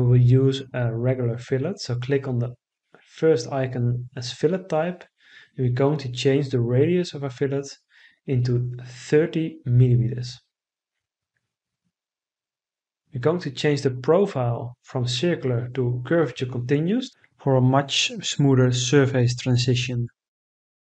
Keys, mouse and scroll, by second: 7.2 3, 7.8 0, 9.3 Return.